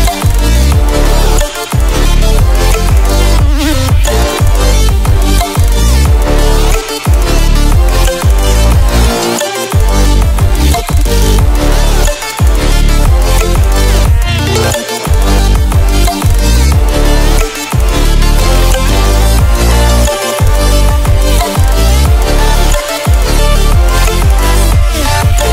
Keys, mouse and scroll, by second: 0.2 click, 1.7 ctrl+scroll up 1, 6.2-6.8 alt+shift+click, 7.3-7.8 click, 10.3-11.2 drag, 18.5 ctrl+w, 21.3 ctrl+w, 22.3 click, 24.7 ctrl+click.